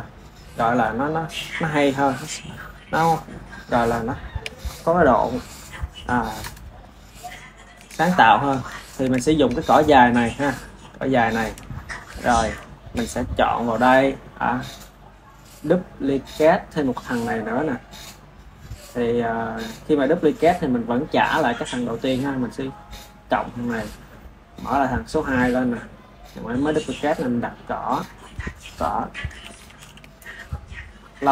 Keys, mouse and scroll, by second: 0.6 click, 3.9-6.7 shift+middle drag, 7.2-9.8 ctrl+middle drag, 9.8 click, 11.0-13.2 ctrl+middle drag, 13.2 click, 17.5-20.1 drag, 23.2-24.2 drag, 26.9-30.0 drag.